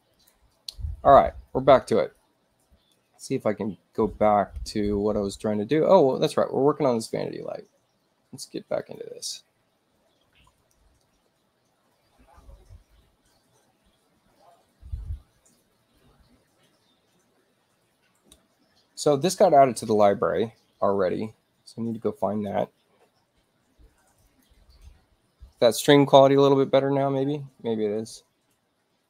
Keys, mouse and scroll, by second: 0.0 click, 0.9 middle click, 2.5 middle click, 6.1 click, 8.7 click, 20.4 space, 22.0 click, 24.2 click, 25.4-27.3 scroll down 2, 28.0 middle click.